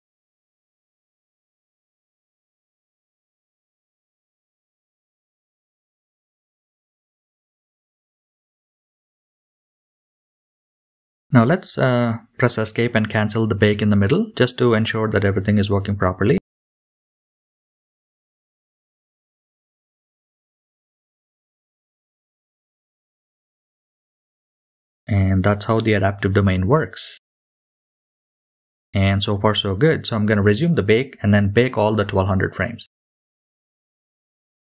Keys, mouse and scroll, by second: 17.2-17.5 scroll down 2, 18.0-19.0 middle drag, 19.7 KP_Decimal, 20.0-20.9 middle drag, 21.3-22.4 drag, 23.0 click, 24.3 click, 25.1 click, 25.4 click, 25.6 click, 26.0 click, 26.6 click, 27.4 click, 27.6 click, 27.7 click, 31.3-34.7 drag.